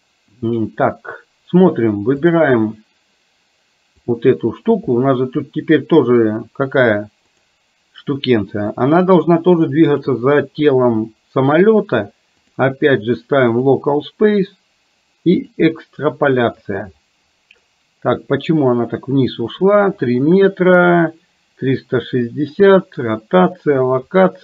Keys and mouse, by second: 2.3 click, 4.1 click, 7.3 click, 8.7 click, 12.7-13.9 drag, 15.4 click.